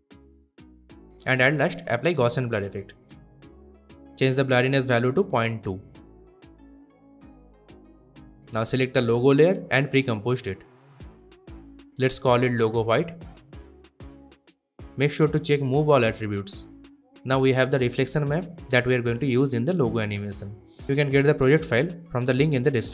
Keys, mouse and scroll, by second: 0.8 click, 1.9-3.0 typing, 3.8 click, 6.0 click, 6.2-7.1 typing, 7.6-8.5 click, 9.4 right click, 10.7 click, 12.0-14.5 typing, 15.1-20.5 drag.